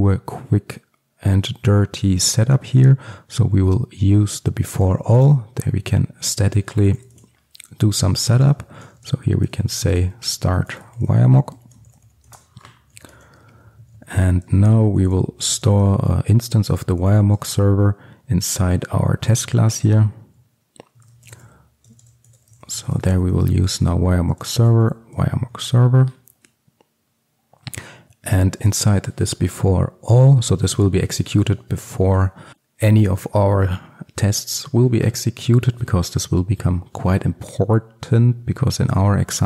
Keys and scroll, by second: 4.8 Return, 16.0 Return, 24.6 Return, 30.3 Return.